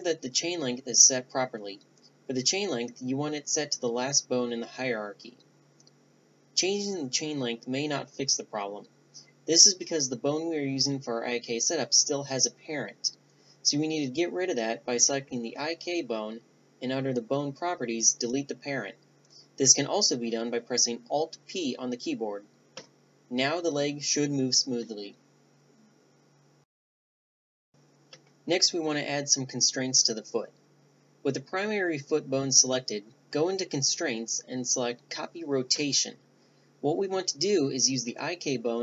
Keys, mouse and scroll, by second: 0.2-2.5 right drag, 1.8 g, 2.7 right drag, 9.0 ctrl+z, 10.2-12.7 right drag, 12.5-13.9 drag, 16.7 Tab, 17.0-18.6 middle drag, 19.4-20.9 drag, 20.9 alt+p, 22.2 Tab, 22.8-24.4 middle drag, 23.2 g, 28.3-30.8 middle drag, 30.8-32.9 right drag, 32.9-34.8 drag, 36.8-37.9 drag.